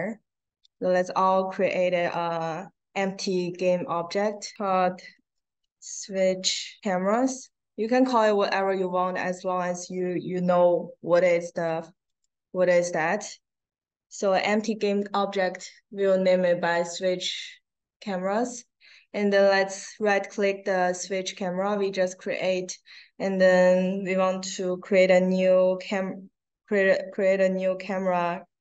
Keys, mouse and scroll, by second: 0.5 click, 1.0 right click, 4.7 s, 5.1 w, 7.1 s, 7.8 click, 12.0 click, 18.4 right click.